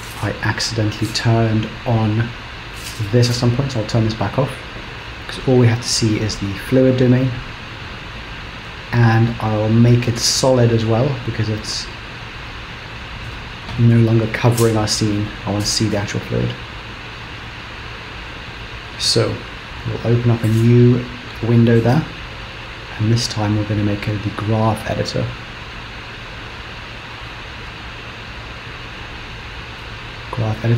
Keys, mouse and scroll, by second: 0.4 click, 2.2 click, 3.9 click, 8.5 click, 9.7-11.0 scroll down 12, 11.0 click, 15.6 shift+Left, 16.3-18.5 scroll up 1, 20.3 click, 23.4 click.